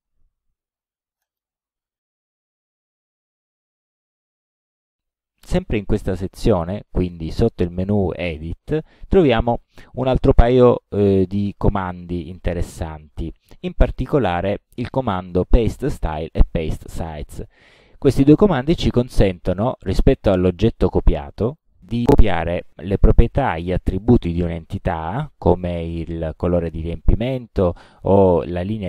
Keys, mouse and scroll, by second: 1.3 right click, 3.3 click, 4.6 click, 5.7 click, 8.0 click, 21.2 click.